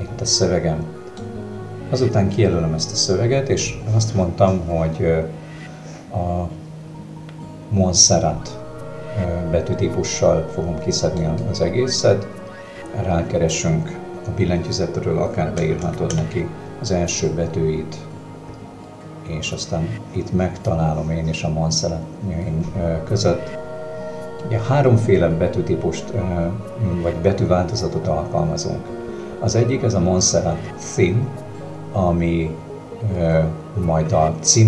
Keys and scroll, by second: 15.6 m, 15.9 o, 16.1 n.